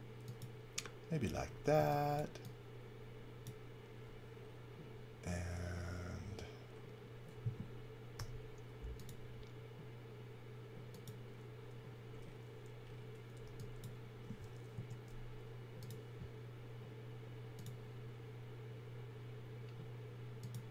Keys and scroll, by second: 1.7 e, 8.1 i, 13.4 e, 14.7 a.